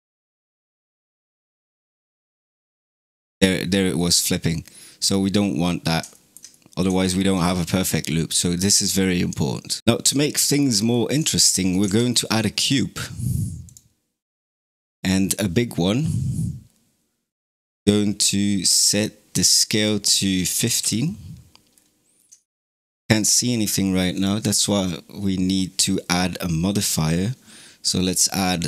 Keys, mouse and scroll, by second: 0.4 scroll down 1, 4.9 click, 5.7 scroll down 2, 6.0-9.8 shift+middle drag, 9.8 space, 10.1-11.7 shift+middle drag, 11.7 shift+a, 18.7 click, 19.5-21.6 alt+drag, 21.6 scroll down 2, 22.2-24.0 shift+middle drag, 24.0 click.